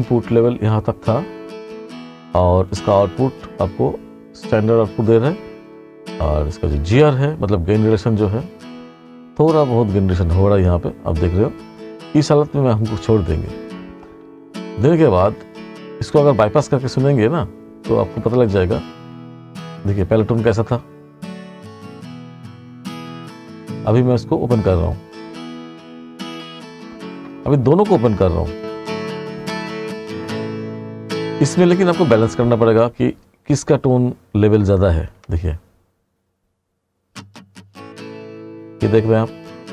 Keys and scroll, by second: 32.7 space.